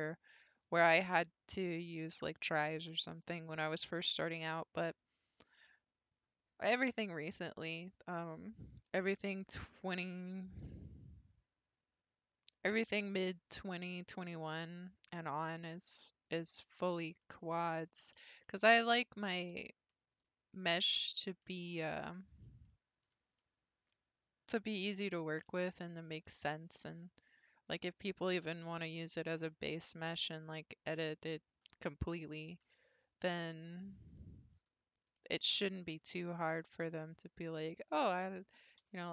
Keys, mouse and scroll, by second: 17.2-17.7 scroll up 2, 17.7 scroll down 2, 18.4-29.7 ctrl+middle drag, 29.7-30.1 scroll up 1, 30.3 scroll down 2, 32.8 Tab, 33.5 click, 34.6 Tab, 35.2-36.5 middle drag, 36.5 shift+scroll up 2, 36.7-37.7 shift+middle drag, 37.7 click, 38.8 l.